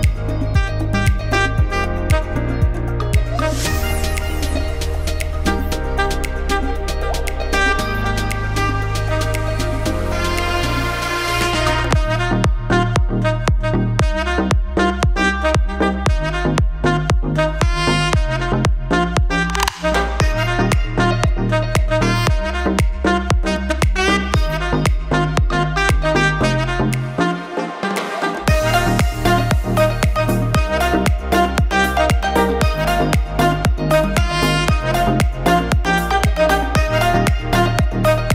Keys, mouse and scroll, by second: 0.9 scroll up 1, 1.1 shift+middle click, 1.4 middle click, 1.5-1.9 scroll up 1, 1.9 click, 5.7 KP_Decimal, 6.1 middle click, 7.5 click, 9.9-10.7 scroll up 3, 10.1 middle click, 10.9 scroll down 3, 11.1 middle click, 12.3-12.8 scroll up 2, 19.4 click, 20.7 click, 26.1 ctrl+z, 27.0 click, 29.3 click, 30.3 scroll up 1, 30.4 shift+middle click, 30.8 middle click, 31.2 shift+middle click, 31.4 middle click, 31.9 middle click, 32.1 shift+scroll up 1, 32.2 shift+middle click, 32.6-33.4 scroll up 3, 32.9 click, 33.4 Tab, 33.7 middle click, 34.8 ctrl+r, 37.1 Tab, 37.4 alt+a, 37.5 scroll down 3, 37.8 middle click.